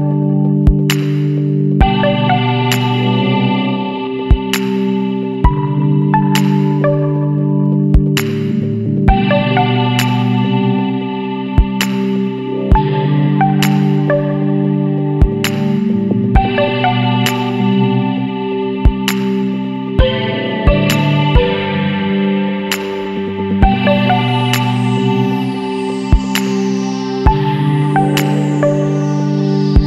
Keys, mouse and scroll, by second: 0.0 middle click, 0.2-0.6 scroll up 1, 1.9 click, 2.5 click, 3.0 click, 4.8-5.3 middle drag, 5.3 scroll down 1, 5.4-6.5 middle drag, 6.5 click, 6.9-8.9 middle drag, 8.9 click, 9.4-10.0 middle drag, 10.0 scroll down 2, 10.3-13.2 middle drag, 13.2-16.2 drag, 16.4-16.7 middle drag, 16.7-17.2 scroll up 1, 17.2-18.9 middle drag, 18.9 scroll up 1, 19.1 scroll down 2, 19.2 scroll up 1, 19.3-20.0 middle drag, 20.0 scroll down 2, 20.1 Tab, 20.2-20.8 middle drag, 20.8 Tab, 22.1 Tab, 22.3-23.3 middle drag, 23.3 Tab, 23.7 click, 24.2 click, 25.6 Tab, 26.1 Tab, 28.7 ctrl+a.